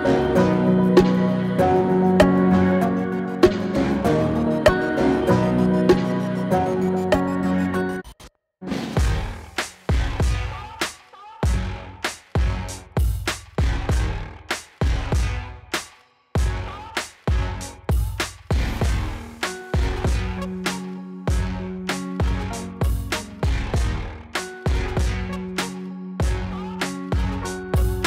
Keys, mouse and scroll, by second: 0.1 click, 1.9 click, 4.5 Return, 6.8-7.3 scroll up 1, 8.5-10.7 drag, 11.7-14.5 drag, 19.7 scroll down 1, 19.8-20.1 click, 20.2 scroll up 1, 20.3 click, 20.4 Return, 20.6 click, 20.8 scroll up 1, 20.9 click, 21.9 scroll down 1, 22.0-22.3 click, 22.3 scroll up 1, 22.4 click, 22.8 Return, 22.9 click, 23.1 scroll up 1, 23.3 drag.